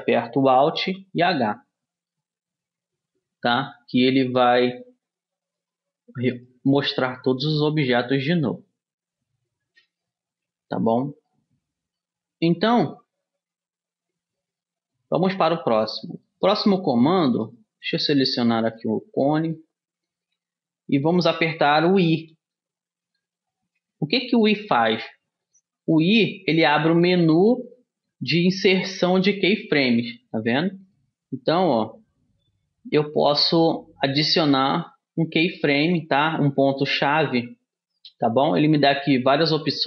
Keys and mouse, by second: 1.2 alt+h, 4.4-5.8 middle drag, 6.0-10.6 right drag, 11.6-18.3 middle drag, 18.3 click, 19.1-21.8 middle drag, 22.7 i.